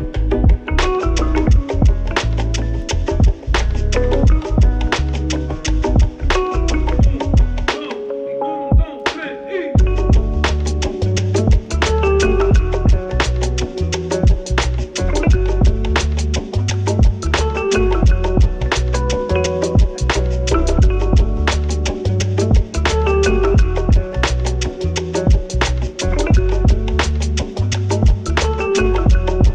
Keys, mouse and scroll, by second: 0.0-0.2 typing, 2.0 click, 2.4 0, 2.6 Return, 4.4 Return, 8.1-14.6 drag, 14.6-20.1 drag, 20.6 0, 20.9 Return, 23.2 click, 25.7 click, 25.8 click, 26.6 right click.